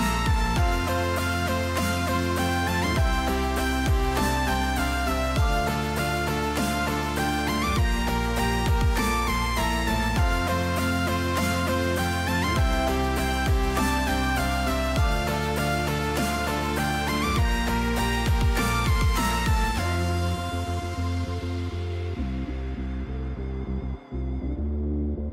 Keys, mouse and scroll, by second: 5.2 shift+middle click, 14.4 click, 15.7 shift+middle click, 18.4 click, 20.3 click, 21.4 click, 22.4 click, 24.0 click, 25.0 shift+middle click.